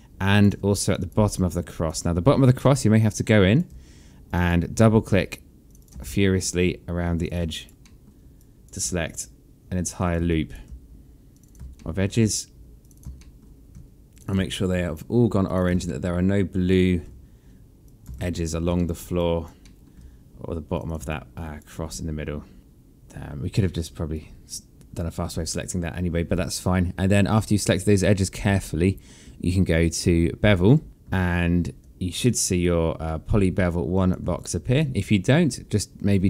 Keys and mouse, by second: 0.6 shift+click, 1.4 alt+click, 2.4 alt+middle click, 2.9 alt+click, 4.1 shift+click, 5.5 shift+click, 5.9 alt+middle click, 6.9 shift+click, 7.3 alt+click, 7.6 alt+middle click, 8.2 alt+click, 9.7 shift+click, 10.1 alt+click, 11.1 shift+click, 11.6 alt+middle click, 12.6 shift+click, 13.0 alt+middle click, 13.9 shift+click, 14.3 alt+click, 15.3 shift+click, 15.6 alt+middle click, 17.6 shift+click, 17.9 alt+click, 18.6 alt+middle click, 19.0 alt+click, 19.4 alt+middle click, 20.5 shift+click, 20.9 alt+click, 22.5 shift+click, 22.6 alt+middle click, 23.9 alt+click, 25.3 alt+click, 28.4 alt+middle click, 31.0 alt+click, 32.8 click, 34.2 alt+click.